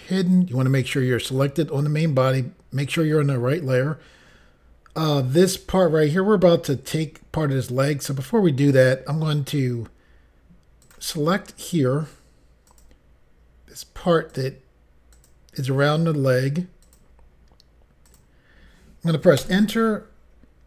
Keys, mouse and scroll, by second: 0.2 click, 0.3 click, 10.8 click, 11.6 click, 11.7 click, 12.7 click, 14.3 click, 15.1 click, 16.8 click, 18.1 click, 19.4 Return.